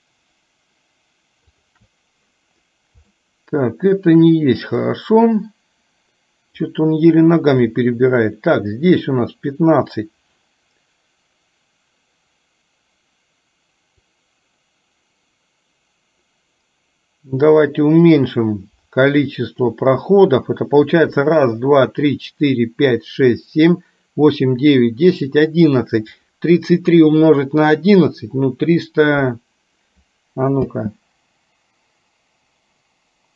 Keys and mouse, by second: 1.5 shift+click, 3.3 shift+middle click, 5.0-6.8 drag, 14.2-19.8 drag, 30.8 space.